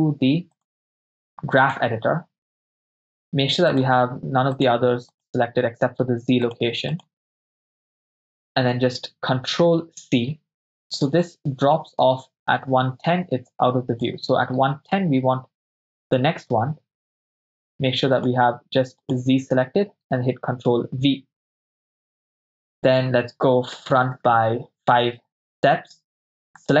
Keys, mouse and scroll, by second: 1.7 click, 3.7 click, 4.7 click, 5.2 click, 6.6 click, 7.0 click, 7.4-7.9 drag, 9.8 ctrl+c, 10.7-14.1 drag, 16.3 click, 16.3 right click, 18.2 click, 19.0 click, 20.6 ctrl+v, 24.0 Right, 24.2 Right, 24.4 Right, 25.0 Right, 26.7 click, 26.7 right click.